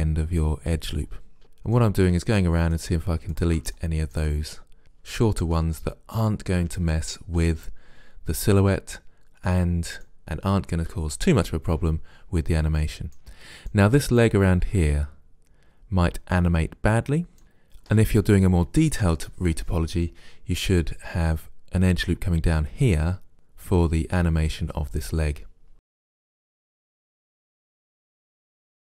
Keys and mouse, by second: 1.4 Delete, 2.6 middle click, 4.0 middle click, 4.8 Delete, 10.1 middle click, 12.9-15.4 middle drag, 17.4 middle click, 23.8 middle click, 25.8 right click, 26.0 Delete, 26.8 right click, 27.2 middle click, 27.6 right click, 28.5 Delete, 28.8 middle click.